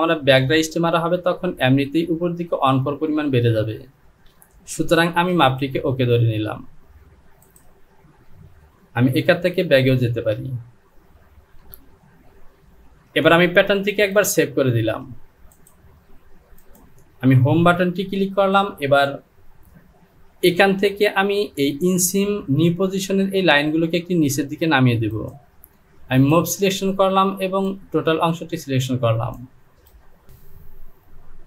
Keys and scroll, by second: 5.2 Delete, 9.5 ctrl+z, 9.9 ctrl+z, 10.4 ctrl+z, 17.9 Home, 30.3 Down.